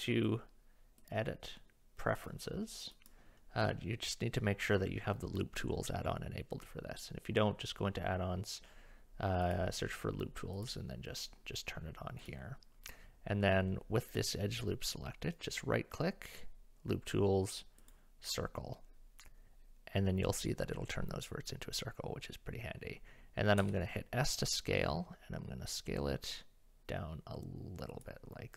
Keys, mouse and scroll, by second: 1.1 click, 2.3 click, 15.4-17.9 right drag, 23.6 s.